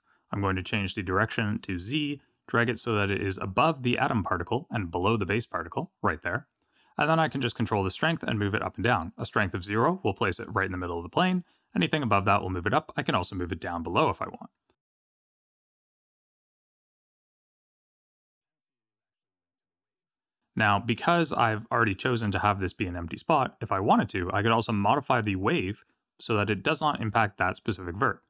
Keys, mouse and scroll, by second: 0.4 click, 2.7 click, 7.1 click, 10.7 click, 24.3 click.